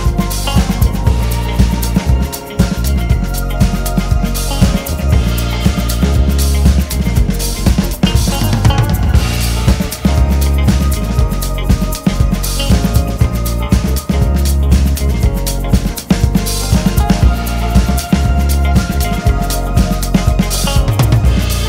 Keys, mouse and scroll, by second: 0.9 scroll down 1, 1.1 KP_1, 1.7-2.7 scroll down 1, 3.1-3.4 scroll up 2, 3.4 `, 4.0 `, 4.4-5.1 scroll up 2, 5.1 shift+click, 5.9 alt+a, 6.1 2, 6.3 click, 6.5-8.7 scroll down 4, 6.7 `, 9.3 scroll down 2, 9.5 KP_1, 10.3-10.7 scroll down 2, 10.9 scroll up 1, 11.1 alt+a, 11.5 scroll down 2, 11.7 `, 15.5 scroll up 1, 15.7 Tab, 16.3 alt+click, 19.1 c, 20.6 c.